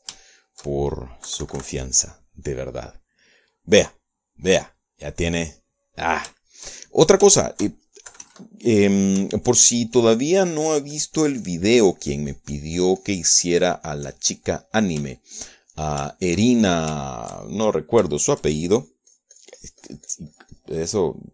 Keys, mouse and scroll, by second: 2.4 KP_Subtract, 2.9-4.4 middle drag, 6.3-8.4 middle drag, 7.6 shift+click, 8.5 shift+middle click, 9.3 KP_Add, 10.7-15.5 ctrl+drag, 15.7 ctrl+middle click, 16.3-18.1 shift+middle drag, 18.2 shift+middle click, 19.3 shift+middle click, 19.9-21.3 shift+drag.